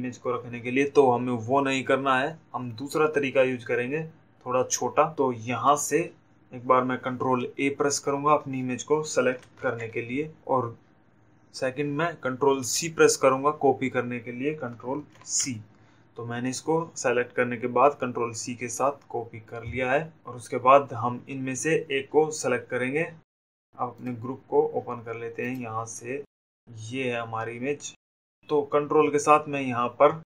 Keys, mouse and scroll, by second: 5.0 click, 7.7 a, 19.7 click, 25.7 click, 27.1 click, 27.8 click.